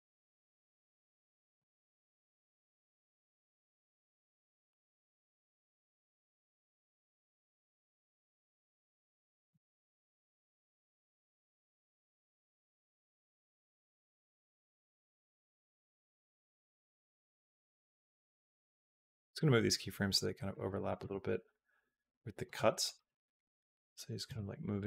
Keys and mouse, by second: 1.0 space, 1.1 click, 1.4 space, 2.5 space, 2.8-5.5 drag, 5.7 click, 5.9 g, 6.9 click, 7.2 click, 7.4 g, 8.3 click, 8.5 g, 9.2 click, 9.3 space, 13.7 space, 14.2 middle click, 14.7 click, 15.3-16.6 drag, 16.9 click, 17.3 click, 17.5 g, 18.4 click, 18.6 g, 19.9 click, 20.1 g, 20.7 click, 20.8 space, 22.3 space, 22.6 click, 22.8 space, 24.1 space, 24.6-24.8 drag.